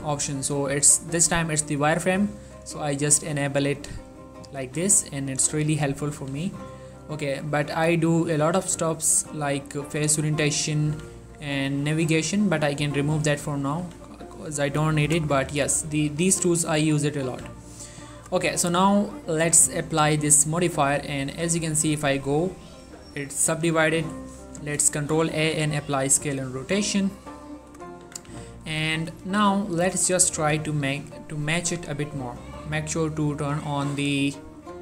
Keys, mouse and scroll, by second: 1.4 click, 2.1-6.3 typing, 2.3 click, 2.9 click, 3.4 click, 4.0 click, 4.9 click, 5.8 click, 6.4-6.9 drag, 6.9-7.9 middle drag, 7.9 q, 9.9 click, 10.2 q, 11.0 q, 11.9 right click, 12.9 click, 13.9 q, 15.6 q, 16.1 click, 16.4 q, 16.7 click, 17.4 1, 19.6 click, 21.5 Tab, 22.3-23.6 middle drag, 23.6 Tab, 24.3 ctrl+a, 25.5 click, 26.8 3, 28.2 Tab, 28.4 z, 28.9 scroll up 1, 29.9 z, 30.5 z, 31.1 click, 32.4 shift+click, 33.7 click.